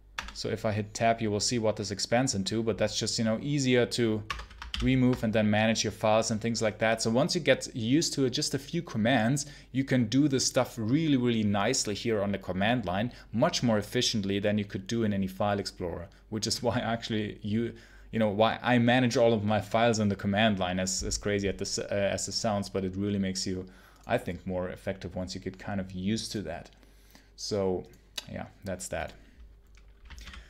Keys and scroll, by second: 0.0 Tab, 4.1 Return, 4.6 ctrl+k.